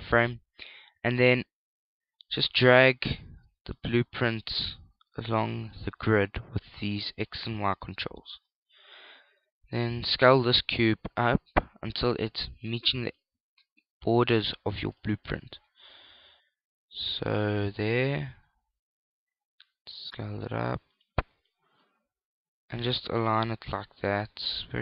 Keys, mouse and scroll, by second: 4.0 click, 7.0 shift+click, 10.8 s, 13.8 click, 15.5 click, 18.5 s, 21.7 click, 22.4 click.